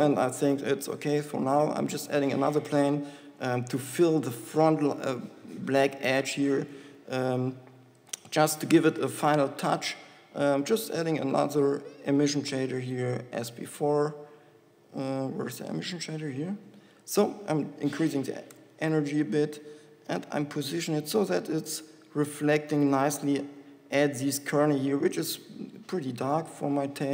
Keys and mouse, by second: 1.1 KP_7, 2.1 shift+a, 3.9 KP_1, 7.5 g, 9.9 KP_7, 21.4 g.